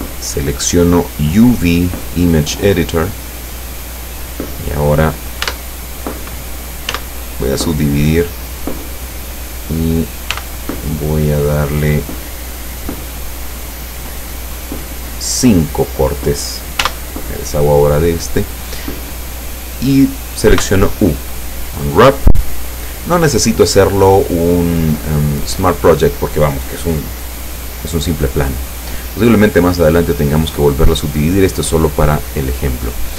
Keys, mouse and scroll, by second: 0.7 click, 3.0 click, 5.5 Tab, 6.9 w, 7.9 click, 10.4 t, 11.7 click, 12.2 click, 12.7 click, 14.0 click, 16.9 t, 20.6 u, 21.6 click.